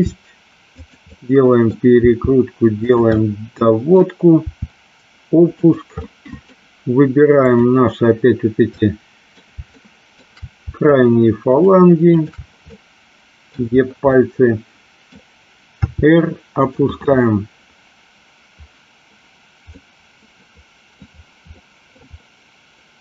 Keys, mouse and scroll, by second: 0.0 r, 0.9 click, 1.1 middle click, 2.2 r, 3.0 click, 3.3 middle click, 4.5 r, 5.6 click, 6.1 middle click, 7.6 click, 8.8 middle click, 9.9 shift+middle click, 11.8 shift+click, 12.9 middle click, 14.2 middle click, 15.9 r, 19.9-21.1 middle drag, 21.6-22.1 middle drag.